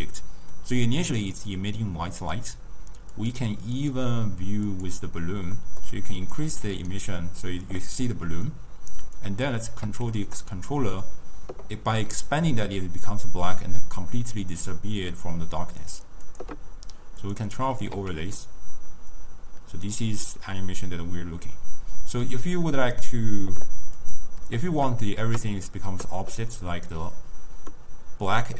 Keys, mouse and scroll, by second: 2.3 click, 3.2 click, 3.8 click, 4.8 click, 5.6 scroll down 2, 5.7 middle click, 6.2 click, 9.1 click, 9.9 s, 17.3 click, 18.0 s, 24.1 click.